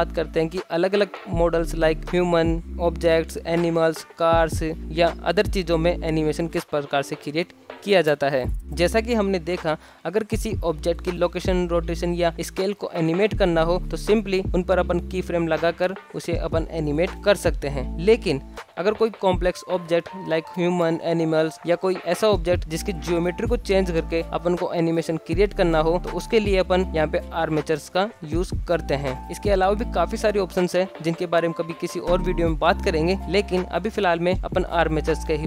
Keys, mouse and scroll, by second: 0.8 click, 6.1-6.5 scroll up 2, 6.5 shift+middle drag, 6.9 x, 7.5 scroll up 1, 7.8-8.2 shift+middle drag, 8.3 scroll down 2, 8.7 alt+g, 8.7 shift+Left, 8.9 i, 10.4 click, 10.8 g, 11.4 s, 11.8 r, 13.2 shift+Left, 13.5 space, 14.2 space, 14.8 shift+Left, 15.1 space, 16.0 space, 16.3 shift+Left, 17.6 a, 17.7 x, 17.9 shift+middle click, 17.9 click, 17.9-18.3 scroll up 2, 18.4 shift+middle drag, 19.2-19.8 shift+middle drag, 19.8 click, 22.1-23.2 shift+middle drag, 23.7 shift+middle drag, 25.1 g, 26.8-27.6 middle drag, 27.6 click, 28.2-29.9 middle drag, 30.8-33.0 shift+middle drag, 35.3 ctrl+alt+F9.